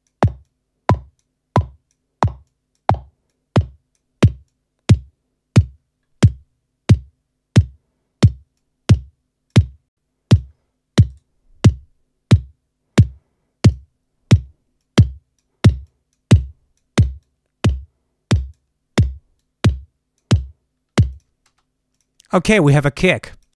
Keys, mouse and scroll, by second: 0.4 click, 1.5-2.0 drag, 2.4 click, 3.2-4.1 drag, 4.4-5.7 drag, 8.5 click, 10.2 click, 11.0 right click, 13.6 click, 14.7-15.5 drag, 15.8-16.2 drag, 16.3-16.9 drag, 17.1-18.6 drag, 19.3-20.3 drag, 21.0 click, 21.4 space, 21.8 click, 23.2 click.